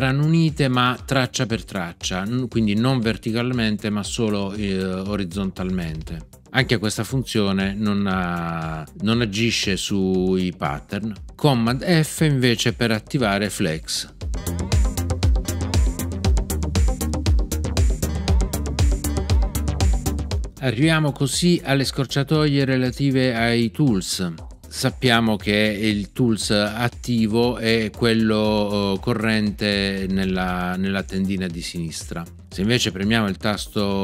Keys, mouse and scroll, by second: 14.3 super+f, 18.0 super+f.